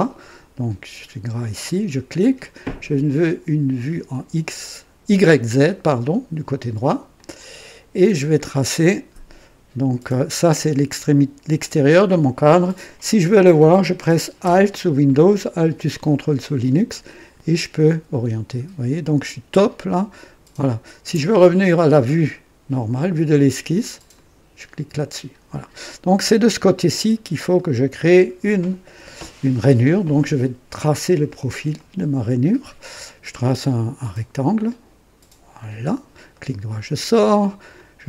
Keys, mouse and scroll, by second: 1.5 click, 3.0 click, 7.1 click, 8.0-8.4 scroll up 2, 8.6-9.3 right drag, 17.0-21.2 ctrl+alt+drag, 24.1 click, 25.7 scroll up 1, 27.0-27.3 scroll up 1, 27.5-28.2 right drag, 31.7 click, 34.1 click, 35.5 click, 36.3 right click, 37.7 click.